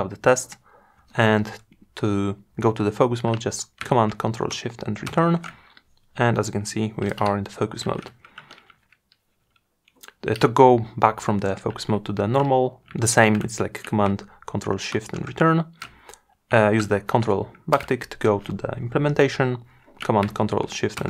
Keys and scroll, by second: 4.1 ctrl+shift+Return, 13.9 ctrl+shift+Return, 17.5 ctrl+`, 19.9 ctrl+shift+Return.